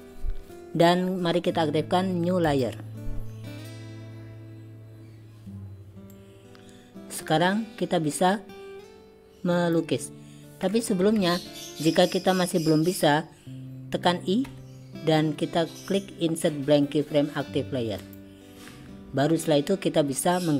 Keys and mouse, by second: 2.6 click, 6.2-9.9 drag, 11.3 ctrl+z, 14.5 i.